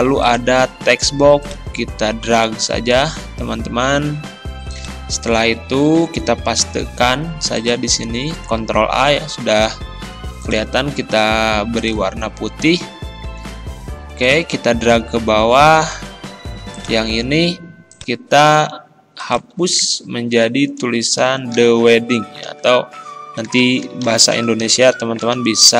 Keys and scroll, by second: 6.9 ctrl+v, 8.5 ctrl+a, 19.6 ctrl+a, 21.6 shift+t, 22.4 h, 23.5-25.3 typing.